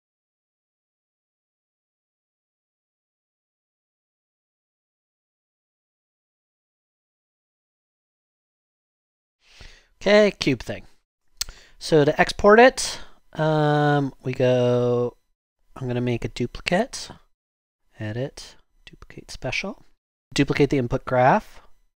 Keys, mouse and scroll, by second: 11.6 click, 21.3 click.